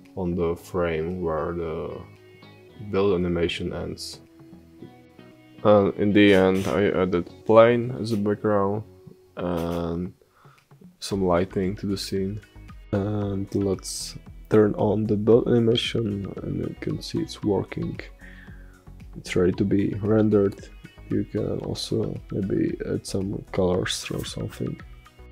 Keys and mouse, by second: 3.7 s, 4.0 s, 4.5 g, 5.1 s, 5.9 click, 6.6 s, 6.9 click, 7.3-8.0 drag, 8.9 g, 9.6 click, 10.3 space, 10.8 space, 11.2 click, 12.2-15.3 drag, 16.2-17.5 drag, 17.5 space.